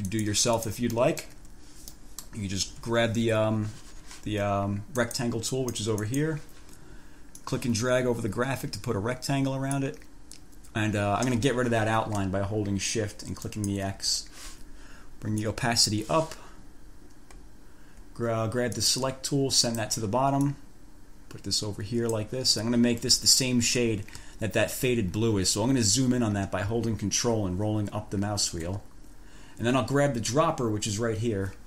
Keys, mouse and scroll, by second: 0.4 click, 0.8 click, 1.3 click, 1.6 1, 2.2 click, 2.4 scroll up 1, 2.5 click, 2.9 F4, 5.2 click, 5.8 click, 7.6-10.2 drag, 13.6-14.1 shift+scroll up 1, 15.6 click, 18.9 click, 19.8 click, 20.6-22.6 drag, 26.1 ctrl+scroll up 2, 27.8-28.8 ctrl+scroll up 6.